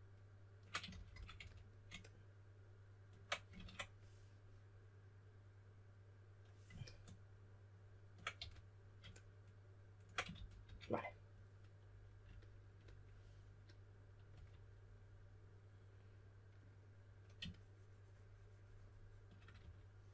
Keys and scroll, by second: 0.6-1.8 typing, 3.5 super+z, 8.3 2, 10.0-11.1 typing, 14.3 3, 19.5-20.1 typing.